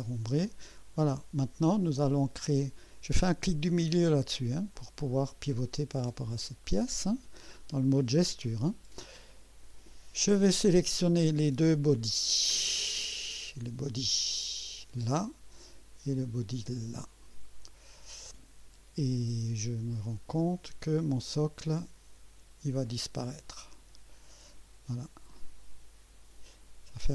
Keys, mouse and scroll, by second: 0.4-2.3 drag, 4.2 middle click, 4.7-6.3 drag, 6.4 right click, 7.0 click, 9.0 click, 10.7-11.0 scroll down 2, 12.3-12.6 scroll down 2, 14.3 click, 16.9 click.